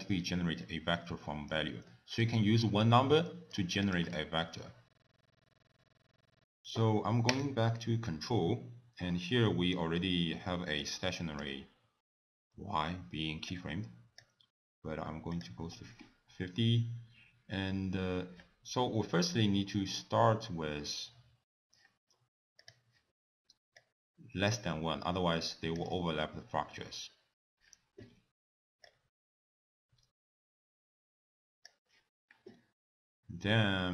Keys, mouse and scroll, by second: 1.9 middle click, 3.2 middle click, 3.8 click, 4.4 ctrl+a, 5.2 BackSpace, 5.3 BackSpace, 5.4 BackSpace, 5.5 middle click, 5.7 middle click, 5.8 click, 6.1 middle click, 6.2 scroll down 3, 6.3 middle click, 7.3 click, 9.5 middle click, 10.8 click, 13.5 click, 14.2-15.4 scroll down 1, 15.4 click, 17.8 scroll down 2, 22.6 click, 23.8 click, 28.9 click.